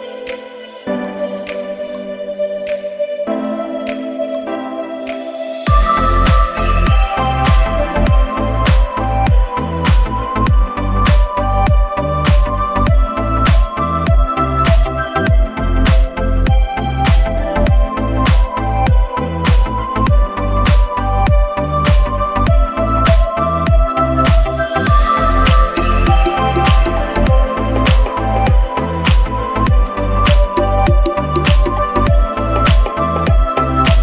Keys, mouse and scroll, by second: 1.3-1.7 scroll down 4, 1.6 middle click, 2.3-3.2 scroll down 2, 2.7 middle click, 3.2-4.0 scroll up 10, 3.5 middle click, 4.2 click, 6.7 ctrl+z, 7.4 scroll down 1, 8.2 click, 8.2-8.6 scroll down 1, 9.0 scroll up 3, 9.3 click, 10.2 scroll down 1, 10.9 click, 10.9 scroll down 5, 13.4 scroll down 1, 14.3 scroll down 7, 15.3 click, 17.6-18.4 scroll up 7, 18.7 click, 19.5 s, 21.2 scroll up 2, 21.7 middle click, 22.2 scroll down 1, 22.4 middle click, 22.4-22.7 scroll up 1, 22.7 scroll down 1, 23.2 click, 25.7-26.2 scroll down 3, 26.0 middle click, 26.5-27.0 scroll up 2, 26.7 middle click, 27.4 click, 29.1 click, 31.3 scroll down 2, 31.6 click, 32.3 middle click, 32.8 scroll up 2, 33.0 click.